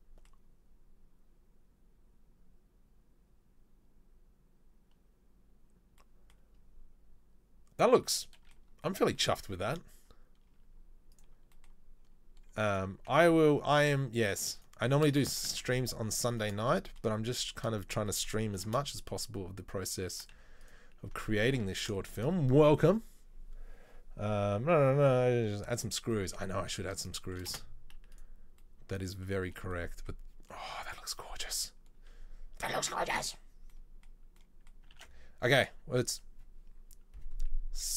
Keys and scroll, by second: 9.4 Tab, 15.5 ctrl+z, 18.7 ctrl+b, 20.5 z, 21.7 Tab, 27.5 space, 35.1 ctrl+s.